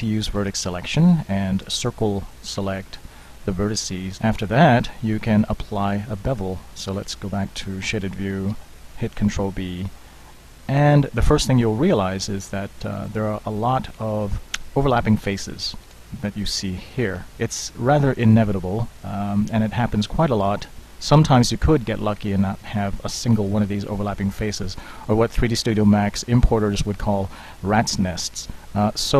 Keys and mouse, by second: 0.4 a, 1.8 c, 5.5 Tab, 6.1 Tab, 7.1 z, 8.6 ctrl+b, 14.9-15.6 middle drag, 16.4-17.3 middle drag, 17.4 middle click, 20.3 middle click, 20.5 middle click, 20.7 middle click, 22.3 ctrl+z.